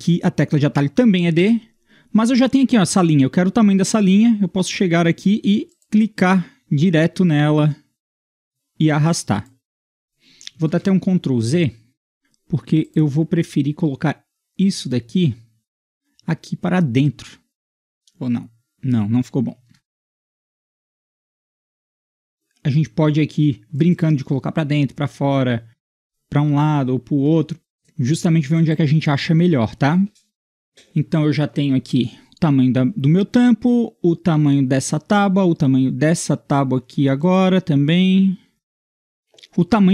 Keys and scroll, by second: 1.4 d, 10.7 ctrl+z, 11.6 ctrl+z, 12.0 ctrl+z, 19.7 ctrl+z, 20.0 ctrl+z, 20.2 ctrl+z, 26.7 Tab, 27.3 Tab.